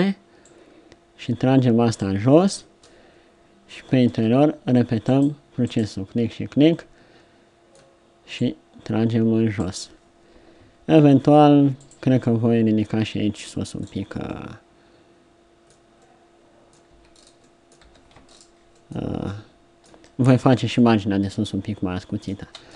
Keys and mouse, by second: 0.4-2.3 drag, 2.3-4.0 middle drag, 4.0 ctrl+r, 11.0 ctrl+r, 13.7 middle click, 14.5 middle click, 15.3 middle click, 16.1 middle click, 16.9 z, 17.8 z, 19.9 Tab, 22.4 Tab.